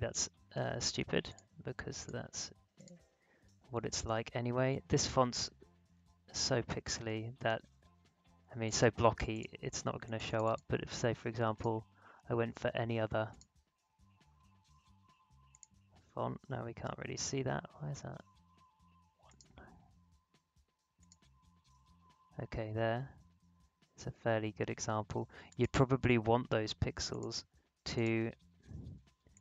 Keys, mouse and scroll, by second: 5.9 click, 5.9-6.8 typing, 8.6 click, 15.5 click, 19.2 click, 23.2-23.7 alt+scroll up 1, 23.7-24.3 alt+scroll down 1, 25.5-29.4 drag.